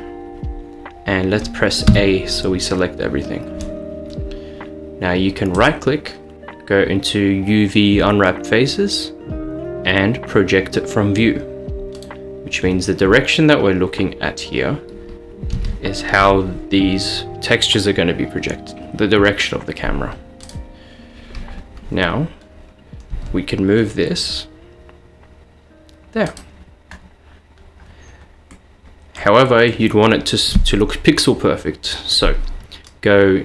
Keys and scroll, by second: 1.9 a, 15.6 a, 16.3 g, 23.2 g.